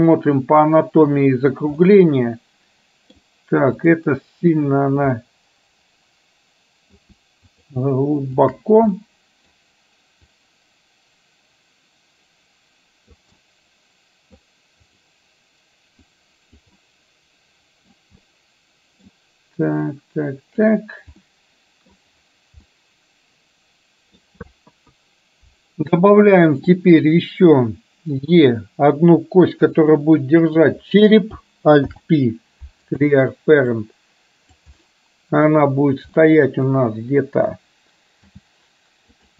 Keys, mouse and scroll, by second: 1.9-3.2 middle drag, 3.8 click, 5.3-7.1 middle drag, 7.7 shift+click, 8.4 shift+click, 9.1 middle click, 10.4-13.2 drag, 13.4-14.6 middle drag, 14.9 click, 16.2 click, 16.8-17.9 middle drag, 18.4 middle click, 20.2 click, 21.3 middle click, 22.7-24.2 middle drag, 24.8 KP_1, 30.6 click, 31.9 alt+p, 33.8 click, 34.9 middle click, 36.3 middle click.